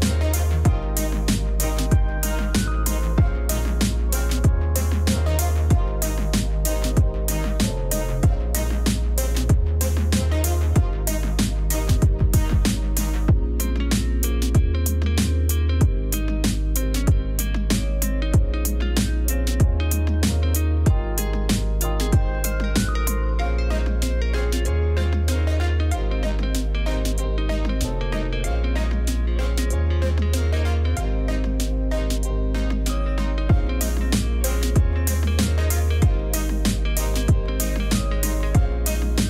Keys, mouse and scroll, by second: 0.3 ctrl+click, 2.9 ], 8.3 ctrl+alt+z, 10.1 x, 11.6 Return, 13.2 ctrl+z, 14.1 ctrl+0, 17.3 scroll up 2, 19.2 Return, 20.1 ctrl+0, 25.0 [, 25.5 ], 25.9 click, 26.1 click, 26.5 ctrl+z, 26.6 click, 27.4 Return, 27.5 [, 27.9 [, 28.0 click, 28.3 ctrl+z, 28.3 click, 28.7 click, 28.8 x, 29.3 x, 29.9 click, 31.1 Return, 32.0 Escape, 32.2-33.7 drag, 34.0 [, 34.4 [, 34.6 click, 34.8 click, 35.7 x, 35.8 click, 37.0-37.9 typing, 38.9 ctrl+z.